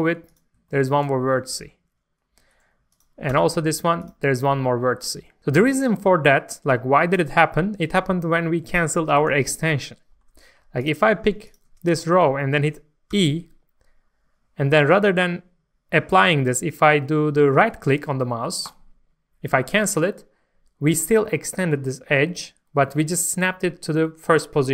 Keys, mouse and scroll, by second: 0.3 click, 0.7 shift+middle click, 2.9 click, 3.3 g, 4.0 click, 5.7 scroll down 1, 7.0-7.3 scroll up 1, 9.5 scroll down 1, 9.8 shift+middle click, 10.8 click, 11.5 ctrl+shift+click, 12.5 shift+middle click, 13.1 shift+middle click, 18.6 right click.